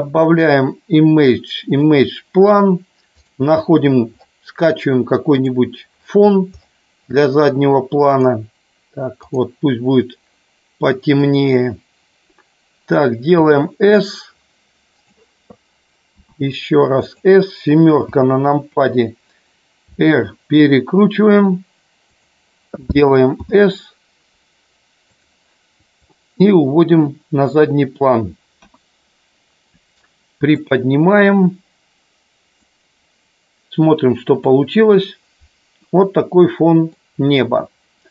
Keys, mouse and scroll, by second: 14.9 click, 17.0 click, 17.9 KP_7, 19.8 r, 22.0 click, 26.0-27.4 drag, 28.5 KP_1, 30.5-32.6 drag, 34.8 click, 35.6-36.9 middle drag.